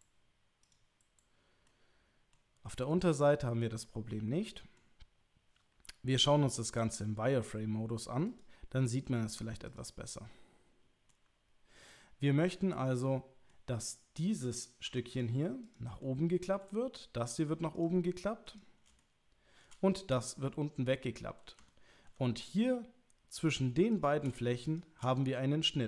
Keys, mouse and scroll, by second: 1.7 middle click, 2.9-4.8 middle drag, 8.3 click, 9.0 middle click, 10.0-11.1 middle drag, 13.2 middle click, 14.8 3, 15.2 click, 15.6 click, 16.0 middle click, 17.2 click, 17.7 click, 18.5 click, 19.0 shift+middle click, 20.1 click, 21.7 ctrl+middle click, 23.4 click, 23.9 shift+click, 25.2-25.8 middle drag.